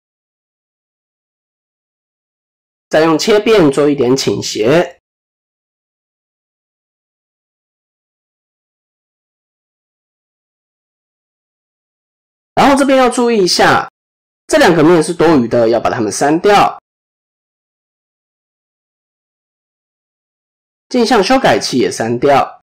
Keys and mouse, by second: 2.4-8.9 right drag, 8.9 middle click, 9.7 middle click, 10.7 KP_7, 11.9 click, 12.2 middle click, 13.1 shift+middle click, 13.5 middle click, 16.2 3, 17.4 shift+click, 17.8 x, 19.6 middle click, 20.0 Tab, 20.3 middle click, 21.8 click.